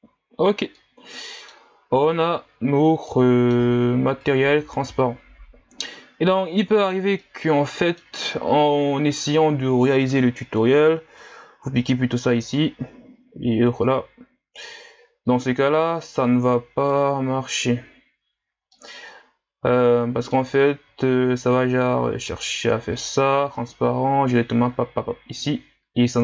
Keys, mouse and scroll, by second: 0.3-0.8 scroll down 1, 0.8-4.2 middle drag, 4.2-15.7 drag, 15.7-18.7 scroll up 1, 18.7-19.5 scroll up 3, 19.5-20.7 scroll up 1.